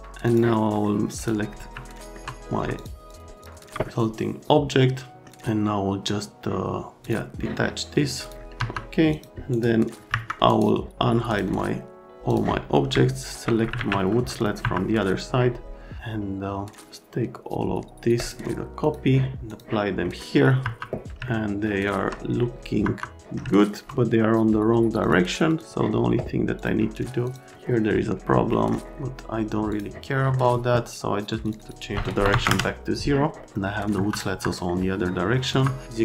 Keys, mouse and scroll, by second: 0.2 click, 1.1 click, 1.8 alt+middle click, 2.7 ctrl+middle click, 2.9 ctrl+middle click, 3.3 ctrl+middle click, 3.5 ctrl+middle click, 3.9 alt+middle click, 7.0 click, 8.2 alt+click, 8.5 F3, 9.1 click, 9.5 scroll, 10.1 Escape, 10.4 scroll, 11.3 click, 12.3 click, 13.2 ctrl+click, 14.4 click, 14.6 F3, 15.1 click, 18.2 click, 18.8 click, 19.5 click, 20.0 middle click, 20.6 F3, 21.2 alt+middle click, 22.8 F3, 23.5 middle click, 25.0 click, 25.5 click, 26.6 click, 27.2 click, 28.5 middle click, 29.7 click, 30.1 middle click, 31.4 middle click, 31.6 middle click, 32.3 KP_0, 32.4 KP_Enter, 33.4 scroll down 1, 33.9 F3, 34.3 F3, 35.5 F3.